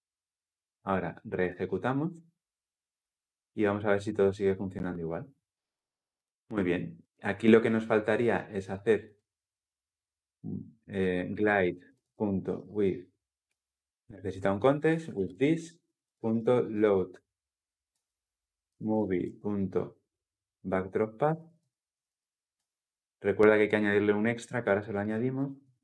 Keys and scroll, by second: 1.0 ctrl+alt+o, 1.2 shift+F10, 13.3 Return, 17.6 Return, 22.4 Return.